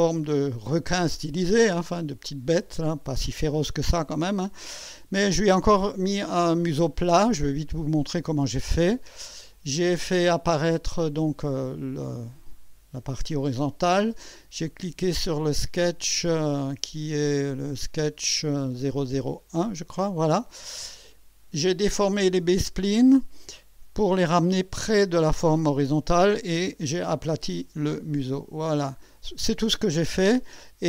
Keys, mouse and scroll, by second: 5.9-7.4 drag, 9.5 click, 9.9 space, 10.7-12.4 drag, 13.1-14.0 drag, 19.6 click, 20.5-20.8 scroll up 1, 21.4-22.4 right drag, 29.8 click.